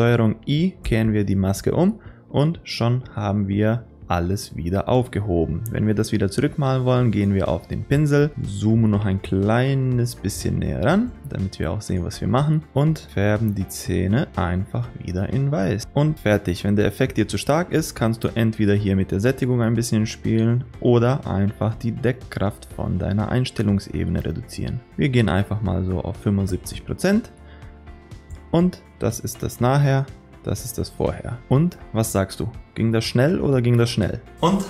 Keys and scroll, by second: 0.9 ctrl+i.